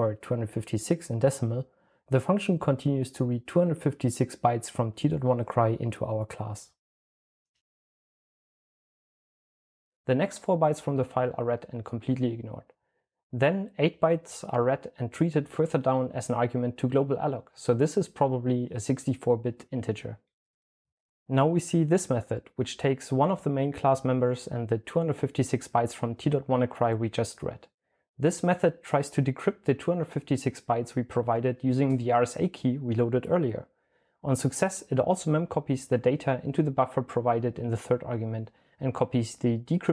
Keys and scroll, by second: 2.9-3.8 typing, 3.8 Return, 5.8 super+l, 6.1-12.5 typing, 16.0-17.3 typing, 19.2-20.9 typing, 34.2 super+l, 34.4-36.1 typing, 37.2-37.9 typing.